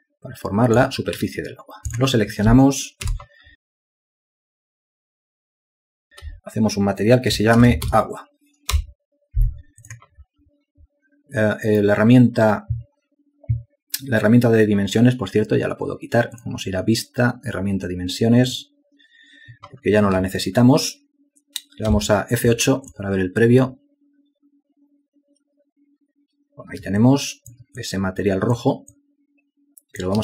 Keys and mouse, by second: 3.7 space, 22.0 F8, 27.1 alt+shift+click, 29.0 ctrl+alt+click.